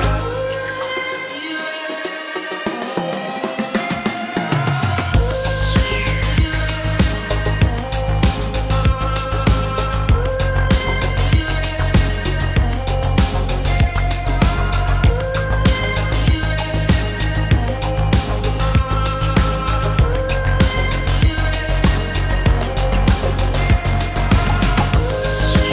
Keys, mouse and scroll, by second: 2.8 -, 4.0 ctrl+d, 10.9 ctrl+d, 16.3 ctrl+z, 20.8 ctrl+d, 24.2 ctrl+d.